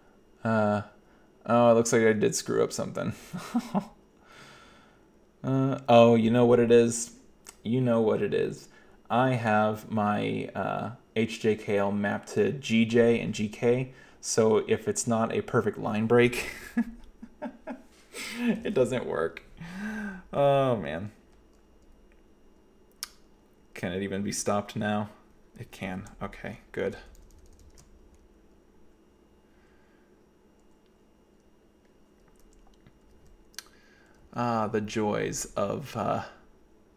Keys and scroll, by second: 18.7 ctrl+c, 26.9 alt+j, 27.0 alt+j, 27.3 alt+j, 27.4 alt+j, 27.5 alt+j, 27.6 alt+j, 33.2 k, 34.2 k.